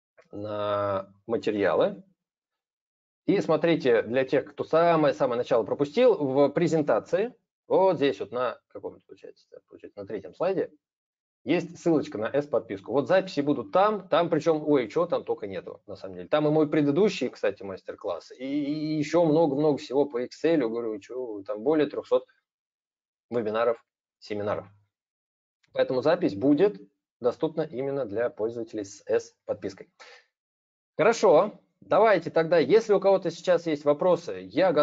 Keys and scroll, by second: 1.5 ctrl+v.